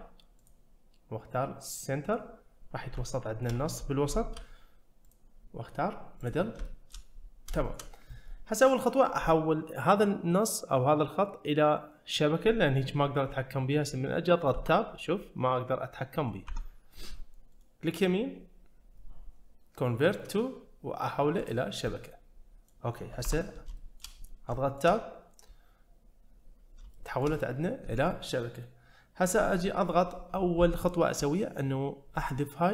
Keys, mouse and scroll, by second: 0.4-2.2 drag, 3.0 shift+middle click, 4.1 shift+middle click, 5.0-6.3 drag, 6.7 shift+middle click, 7.5 shift+middle click, 14.6 Tab, 16.5 Tab, 17.5-21.8 right drag, 21.8 scroll up 1, 21.9-22.7 middle drag, 23.2 Tab, 23.8 shift+middle drag, 24.2-24.5 scroll up 2, 24.5 shift+middle click, 26.3-26.9 scroll up 1, 26.9 shift+middle click.